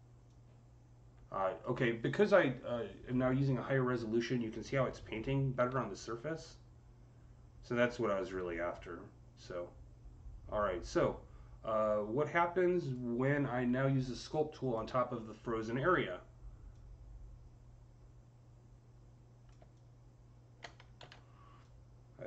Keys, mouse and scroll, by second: 4.9-13.8 drag, 5.4 z, 13.8-16.5 alt+drag, 16.5-22.2 alt+drag, 20.8 ctrl+z.